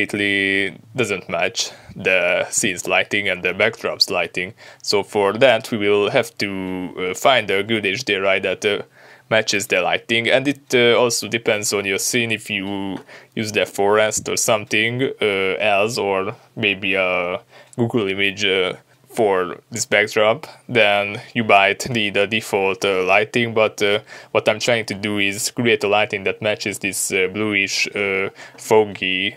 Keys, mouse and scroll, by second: 3.8-16.6 drag, 20.2 ctrl+b, 20.7-21.5 drag, 21.6-23.1 drag, 22.5-23.1 scroll down 2, 23.8 click, 26.1 click.